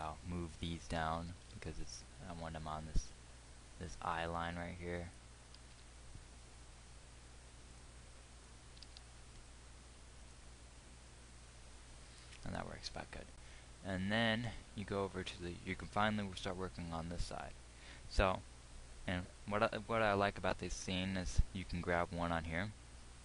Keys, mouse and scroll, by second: 1.6 g, 6.0 g, 9.0 g, 14.8-23.2 middle drag.